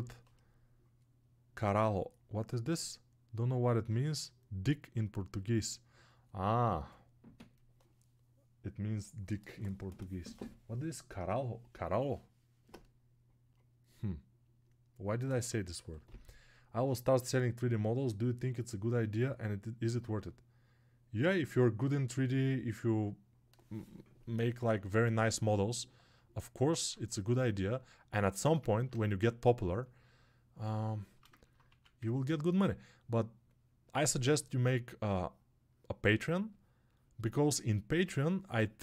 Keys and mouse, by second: 25.6-26.7 alt+right drag, 26.7-38.8 shift+drag.